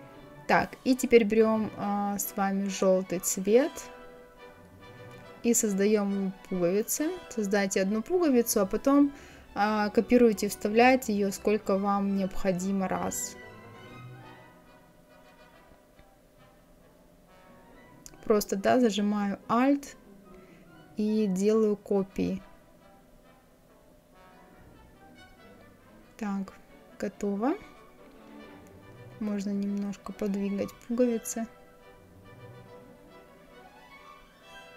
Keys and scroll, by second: 29.3 Left, 32.2 Left, 33.3 Down, 34.0 Up, 34.6 Right.